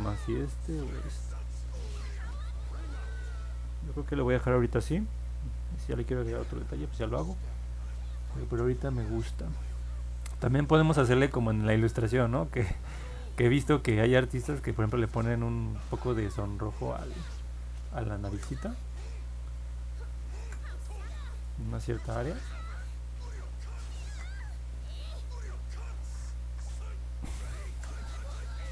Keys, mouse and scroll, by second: 0.4 ctrl+y, 2.7 ctrl+z, 16.0 ctrl+z, 17.1 click, 18.2 ctrl+z, 18.9 click, 20.3 ctrl+z, 21.1 click, 24.0 ctrl+z, 24.9 click, 27.6 ctrl+z, 28.2 click.